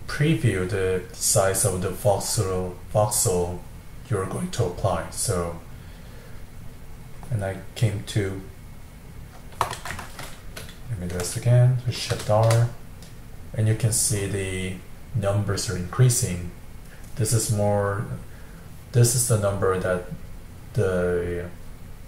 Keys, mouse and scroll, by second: 10.3-12.1 middle drag, 12.1 shift+r.